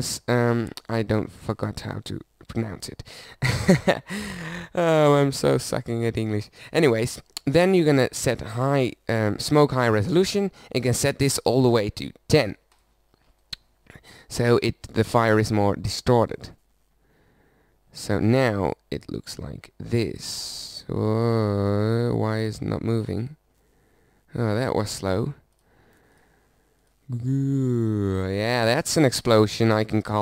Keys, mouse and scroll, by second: 13.2 middle click, 26.2-27.6 drag.